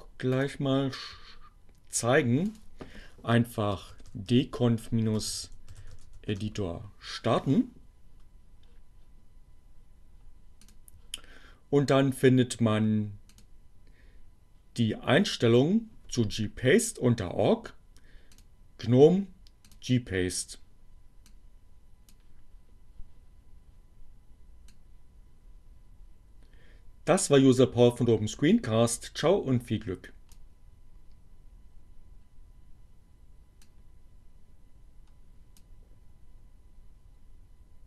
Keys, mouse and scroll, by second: 0.4 click, 2.8-5.6 typing, 5.4 Down, 6.1 Down, 6.4 Return, 10.7 click, 11.5-13.2 scroll down 1, 13.2 click, 18.2 click, 19.3 click, 21.2-22.4 drag, 24.5-30.2 drag, 33.2-35.8 drag.